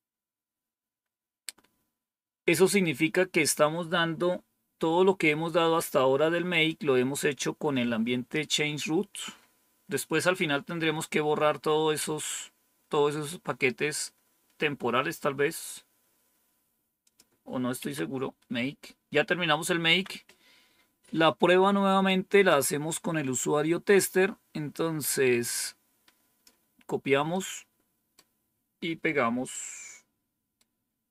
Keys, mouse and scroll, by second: 14.5-15.3 scroll down 1, 16.9 click, 17.7 Up, 19.7 Down, 25.3-26.4 drag, 27.2 right click, 29.4-30.5 right drag.